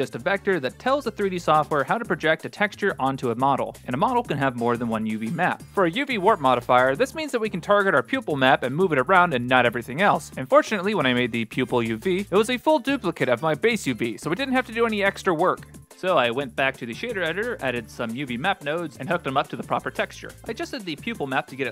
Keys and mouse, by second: 1.5 click, 2.2 click, 6.1 click, 9.0 click, 9.3 shift+a, 11.2 shift+d, 12.0 click, 12.6 click, 13.9-14.5 drag, 15.0-17.2 drag, 19.0 shift+middle drag.